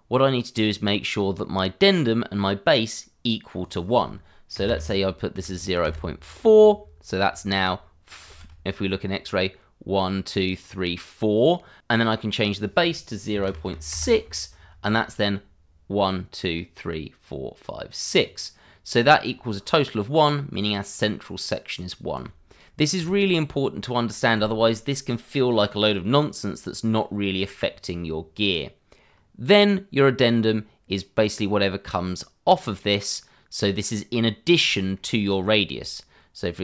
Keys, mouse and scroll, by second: 3.6 click, 4.5 0, 5.3 4, 5.8 Return, 7.0 scroll up 1, 7.3 shift+middle click, 8.3 shift+z, 8.7 scroll up 1, 12.5 click, 13.3-14.1 typing, 14.6 scroll down 1, 14.9 shift+middle click, 15.1 scroll up 1, 18.1 scroll down 1, 19.1 shift+middle click, 22.9 shift+z, 28.1 scroll down 1, 29.0 scroll up 1, 30.4 click, 34.7 shift+middle click, 35.6 middle click, 36.4 click.